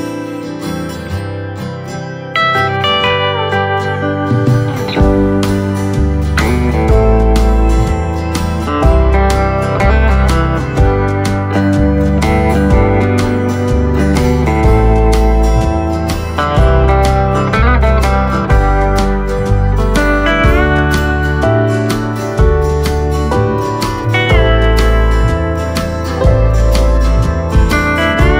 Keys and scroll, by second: 16.6 v, 17.8 space.